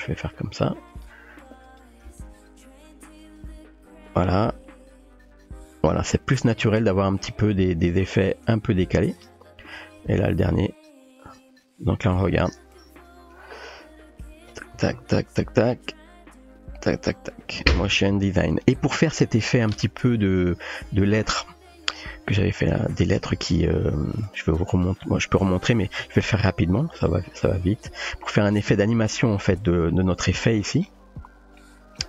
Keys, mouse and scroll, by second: 1.7 click, 2.1 space, 8.3-8.9 drag, 8.4-11.4 typing, 18.1 space, 18.5 click, 21.4-22.0 shift+middle drag, 23.8 click, 27.0 click, 28.9-29.4 shift+middle drag, 31.6 middle click.